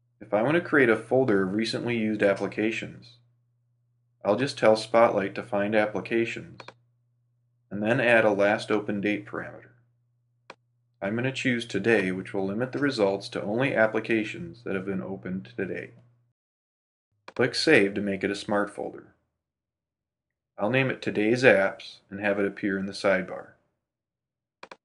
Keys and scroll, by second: 18.7 shift+t, 20.4 shift+a.